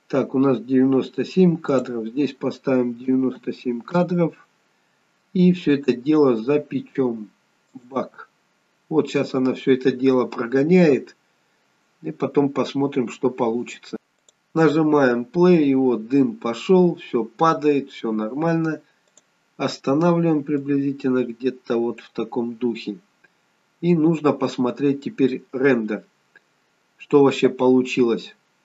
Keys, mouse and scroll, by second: 1.8 click, 7.7 click, 14.3 click, 19.2 click, 20.7 click, 23.6-24.1 scroll up 1, 24.1-26.0 scroll down 1.